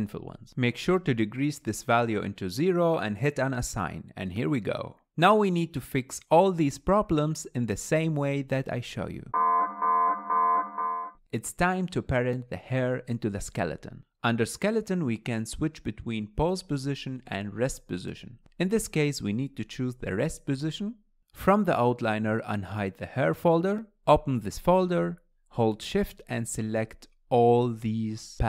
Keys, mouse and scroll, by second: 2.1-5.0 drag, 5.0 middle click, 5.4-7.5 middle drag, 7.5 ctrl+click, 8.2 ctrl+click, 11.1-11.9 middle drag, 11.1 click, 11.9 ctrl+Tab, 15.1-18.1 middle drag, 18.8 click, 19.6 click, 24.3 click, 25.1 click, 26.2 shift+click, 26.8-27.4 scroll down 1, 27.4 shift+click, 27.9-28.4 scroll down 3.